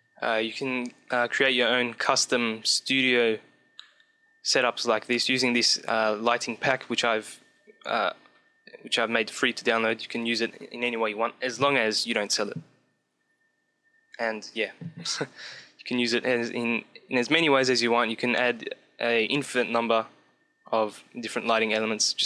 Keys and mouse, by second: 18.4-22.2 middle drag.